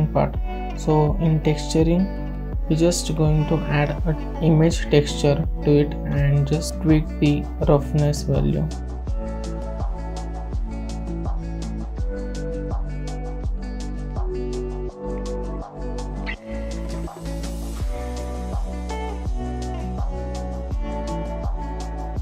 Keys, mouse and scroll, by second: 0.4 KP_Decimal, 1.0 click, 1.7-4.9 drag, 4.9 s, 5.7 click, 6.1-6.5 shift+middle drag, 6.5-6.9 drag, 7.0 s, 7.5-7.9 scroll down 2, 7.9-8.4 shift+middle drag, 8.4 click, 10.4-20.3 drag, 20.3-22.2 drag.